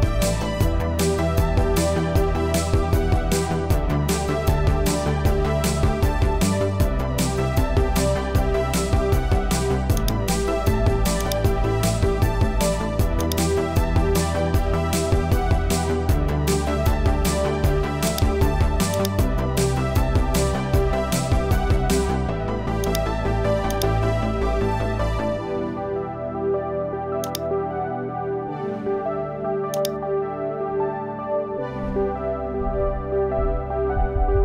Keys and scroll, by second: 2.3 Left, 4.4 shift+Left, 6.8 Return, 16.2 super+a, 20.2 super+d.